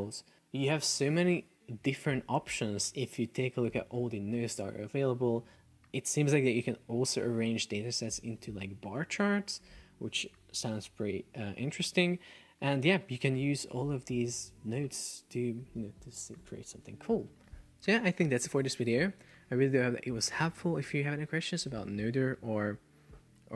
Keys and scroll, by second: 0.4 super+s.